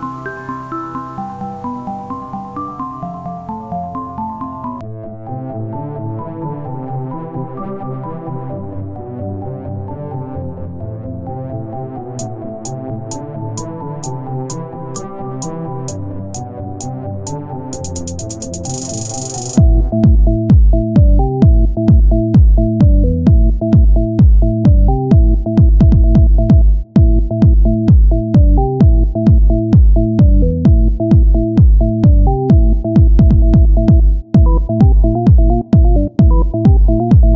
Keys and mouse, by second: 0.0 c, 2.6-5.2 drag, 5.2 s, 5.2 r, 11.8 ctrl+Tab, 12.4-17.4 drag, 13.9 w, 17.4 e, 18.4-20.1 drag, 20.1 r, 22.8 e, 26.9 r, 28.5-29.9 drag, 29.9 e, 32.9 r, 34.0 e, 35.4-37.3 drag.